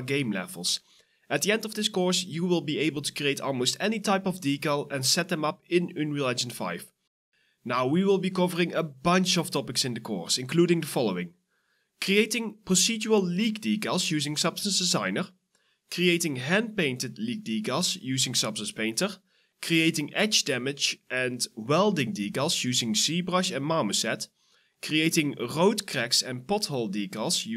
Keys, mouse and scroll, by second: 1.1 ctrl+d, 1.8 e, 2.7 w, 3.6 right click, 3.7 q, 4.4 e, 17.7-18.5 typing, 19.5 double click, 20.4 alt+click, 23.4 alt+click.